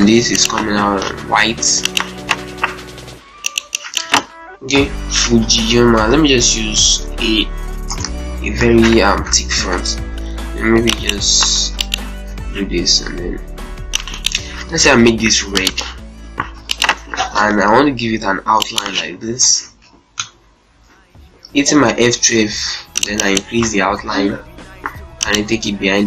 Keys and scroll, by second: 4.9-7.0 typing, 7.2 Return, 9.1 shift+F2, 9.5 F10, 11.3 ctrl+space, 11.5 ctrl+z, 12.1 ctrl+space, 16.3 z, 16.9 ctrl+space, 19.2 shift+F2, 19.9 Print, 23.5 2.